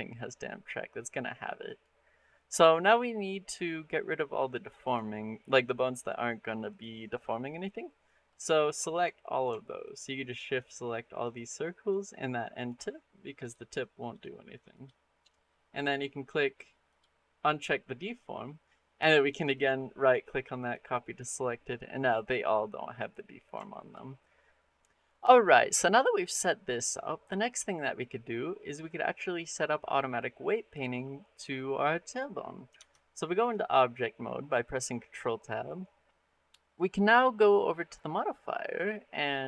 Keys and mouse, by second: 1.5-2.7 drag, 2.7-3.2 middle drag, 3.4 middle drag, 4.7 click, 5.2 middle click, 6.5 click, 8.0 middle click, 8.7-9.0 shift+middle drag, 9.7 shift+click, 11.0 shift+click, 11.7 shift+click, 12.4 shift+click, 13.3 shift+click, 13.9 shift+click, 16.7 click, 19.5-20.5 drag, 23.5 shift+middle click, 23.9 middle click, 24.6 middle click, 32.6 ctrl+Tab, 33.3-34.9 drag, 36.0 click, 36.0 right click.